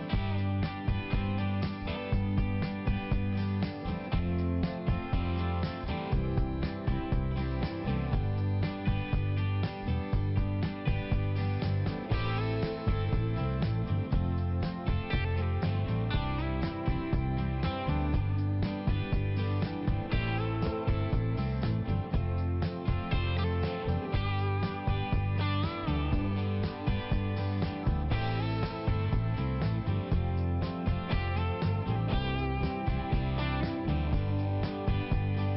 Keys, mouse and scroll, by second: 2.6 click, 3.3 click, 4.0 click, 4.6 click, 4.7 click, 5.0 click, 5.8 click, 6.0 click, 6.3 click, 6.5 click, 6.8 click, 8.3 click, 9.7 click, 11.9 click, 13.2 click, 14.2 click, 15.4 click, 17.0 click, 19.4 click, 20.0 click, 20.7 click, 21.3 click, 22.1 click, 23.5 click, 24.8 click, 27.8 click, 28.3 click, 28.9 click, 29.7 click, 32.1 click, 34.8 click.